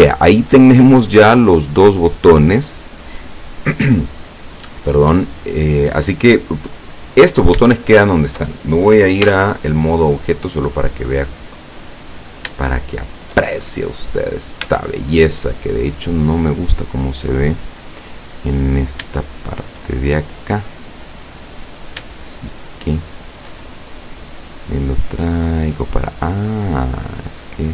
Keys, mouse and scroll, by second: 0.0 shift+middle click, 0.7-1.2 shift+scroll up 1, 7.2-7.7 scroll down 1, 7.8 shift+middle click, 9.3 Tab, 10.0-10.4 scroll down 2, 11.0-11.5 middle drag, 12.1-12.6 scroll up 1, 12.7-13.6 shift+middle drag, 13.7-14.0 shift+scroll up 1, 14.3 right click, 14.7 Tab, 15.4-16.0 scroll up 1, 16.3 middle click, 17.4 scroll up 1, 18.8 right click, 19.5 shift+right click, 20.2-22.0 shift+drag, 22.5 shift+right click, 23.0 shift+right click, 24.0-26.0 drag, 26.3 right click, 26.8-27.7 drag.